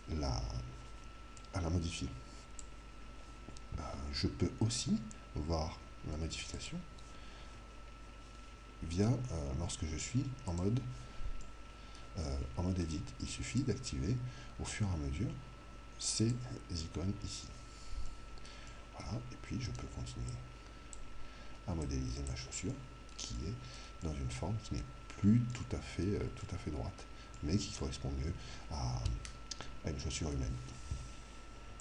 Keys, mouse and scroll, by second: 1.3 click, 6.6 click, 10.5 click, 11.5-14.2 middle drag, 13.5 click, 18.0-20.5 middle drag, 19.7-23.7 drag, 19.7 right click, 22.7 middle click, 23.4 right click, 23.7-29.2 middle drag.